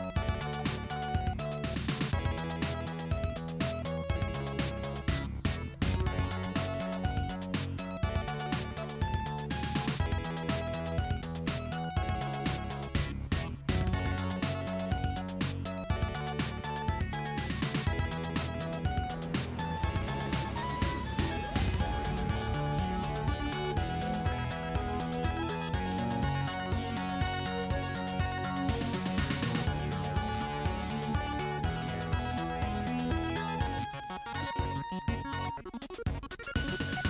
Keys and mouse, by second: 2.3 s, 6.9 s, 13.2-19.6 middle drag, 13.2 KP_3, 15.8 g, 19.6 click, 19.8-21.9 middle drag, 21.9 alt+click, 22.2-25.4 middle drag, 22.6 KP_1, 23.5 e, 25.4 s, 29.2 click, 29.9 shift+drag, 30.3 shift+click, 30.4 shift+middle click, 30.5 shift+click, 30.7 shift+middle click, 30.9 shift+click, 30.9-31.3 shift+middle drag, 31.3 shift+click, 31.4-35.0 shift+middle drag, 32.1 m, 35.0 click, 35.1 middle click, 35.5 click, 36.2 shift+click, 36.9 alt+click.